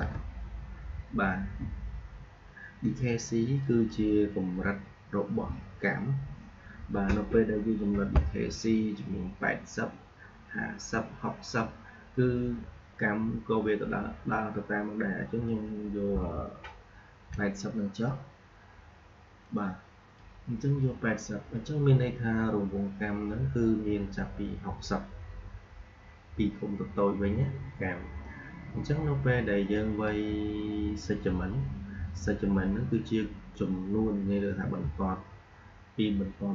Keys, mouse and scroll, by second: 3.5 click, 19.3-22.6 drag, 29.6-32.6 drag.